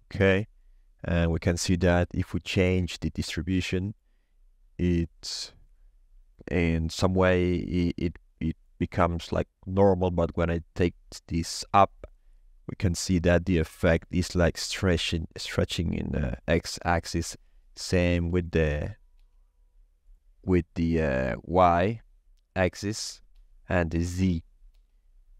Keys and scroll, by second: 17.7 0, 17.8 Return, 19.1 1, 23.1 0, 23.3 Return, 24.4 1, 24.7 Return.